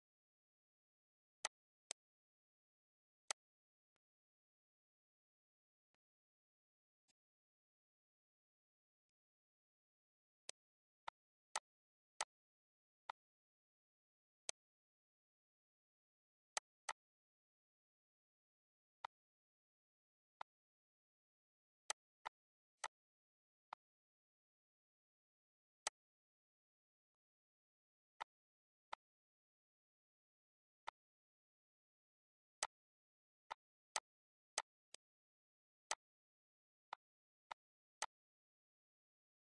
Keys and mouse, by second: 1.4 click, 1.8 click, 3.3 click, 4.0 click, 4.3 click, 5.5 ctrl+s, 5.9 click, 6.3 shift+click, 7.0 shift+click, 8.0 click, 9.0 click, 9.6 ctrl+s, 10.0 click, 10.5 click, 11.1 click, 11.6 click, 12.2 click, 13.1 click, 14.4 click, 16.6 click, 17.4 click, 19.0 click, 20.4 click, 21.8 click, 22.3 click, 22.8 click, 23.7 click, 24.9 click, 25.8 click, 26.5 click, 27.1 click, 28.2 click, 28.4 ctrl+z, 30.8 click, 31.5 ctrl+s, 32.6 click, 34.0 click, 34.5 click, 35.3 ctrl+s, 35.9 click, 36.9 shift+click, 37.5 click, 38.0 click, 38.7 ctrl+s, 39.0 click.